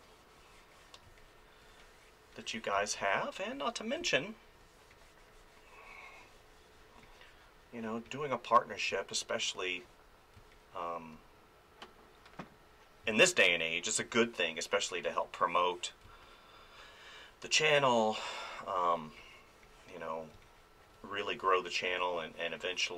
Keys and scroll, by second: 1.2 space, 2.8 space, 8.9 space, 13.0 space, 16.0 space, 20.3 space.